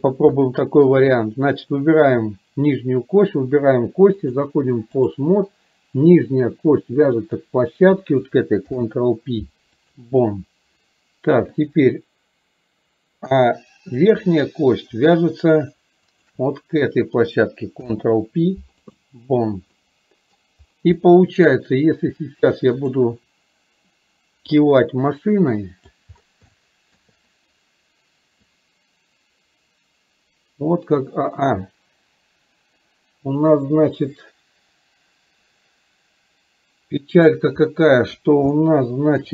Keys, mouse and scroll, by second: 0.4-1.0 middle drag, 4.4 click, 7.4 click, 11.9-13.2 drag, 14.1 click, 16.4 shift+click, 19.9-20.5 middle drag, 21.0-21.6 middle drag, 24.6-26.1 drag, 26.5-27.1 shift+middle drag, 28.6-37.4 drag, 38.7-39.3 shift+middle drag.